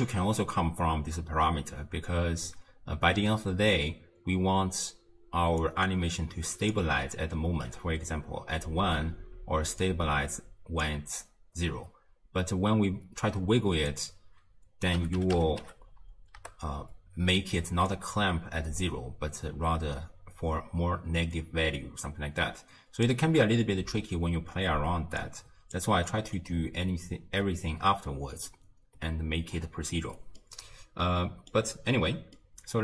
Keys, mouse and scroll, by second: 5.6-8.7 drag, 9.8-13.0 drag, 13.9-17.0 drag, 17.9-21.0 drag, 25.2 click, 26.1 middle click, 26.6-28.3 scroll down 2, 30.4-32.8 middle drag.